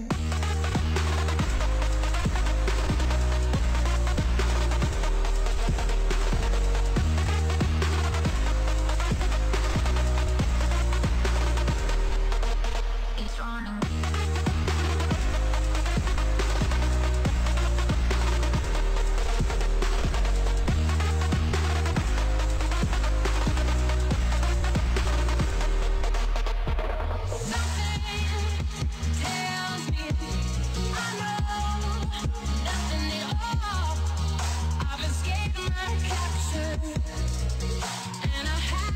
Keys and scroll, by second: 19.4 space, 23.4 v, 34.6 space.